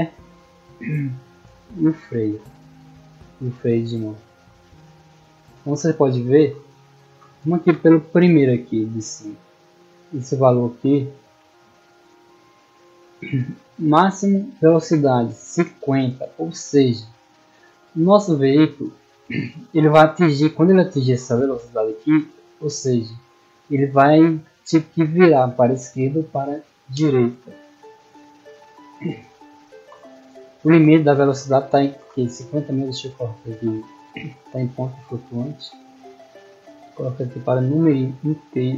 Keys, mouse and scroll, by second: 0.3-0.8 middle drag, 1.1-1.4 middle drag, 1.7-2.0 scroll down 2, 3.5-4.6 typing, 6.7 d, 8.2 middle click, 8.7 right click, 9.0 s, 10.3 click, 10.9 middle click, 16.9 middle click, 20.0-22.2 drag, 22.7 click, 23.5 click, 29.9-31.0 typing, 33.2 right click, 35.5 click, 37.2 click, 38.3 click.